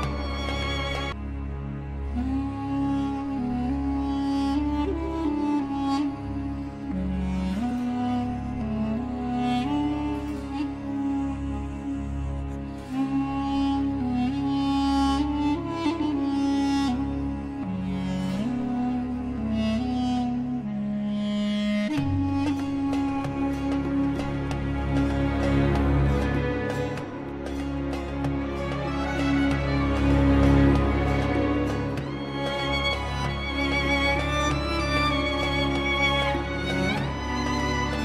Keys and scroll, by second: 1.0 shift+Page_Up, 1.7 Escape, 6.6 Delete, 10.9 ctrl+Page_Down, 12.6 F3, 14.8 Escape, 15.9 shift+F2, 20.3 c, 20.4 Escape, 27.9 space, 28.8 shift+Page_Down, 33.8 Escape, 37.2 Escape, 37.8 F4.